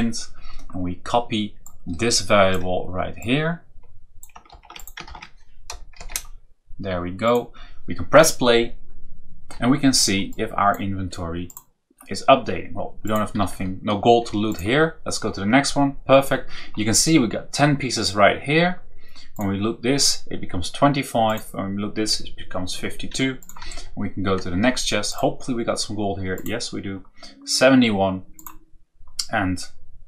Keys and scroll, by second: 4.4 ctrl+shift+c, 5.0 ctrl+v, 5.9 shift+o, 9.5 Down, 13.3 Right, 23.5 Up, 23.8 Right, 25.0 Right.